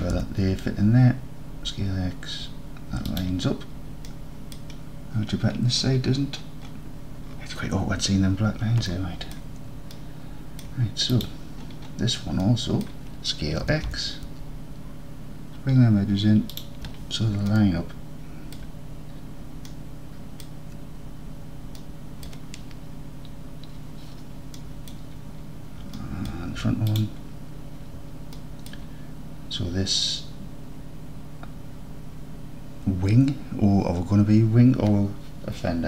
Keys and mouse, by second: 0.0 s, 0.2 x, 3.1 shift+click, 4.1-4.6 middle drag, 9.4 middle drag, 10.0 alt+middle drag, 10.2 alt+middle click, 11.2 click, 12.5-12.9 drag, 13.7 s, 13.9 x, 16.6 shift+click, 17.6-18.1 alt+drag, 18.4 alt+click, 19.7-20.5 drag, 21.9-22.3 alt+drag, 24.6-24.9 middle drag, 26.0 alt+drag, 26.1 alt+middle drag, 26.9 click, 27.1-28.1 middle drag, 28.4 alt+click.